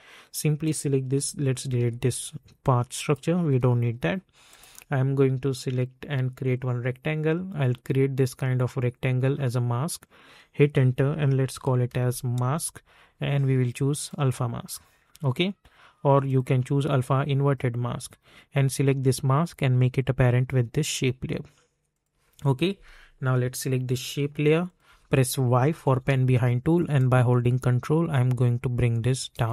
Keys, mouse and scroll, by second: 0.6 click, 2.9-10.0 drag, 10.6 Return, 11.5 m, 12.4 Return, 14.0-21.9 drag, 25.8 y, 26.9-29.5 drag.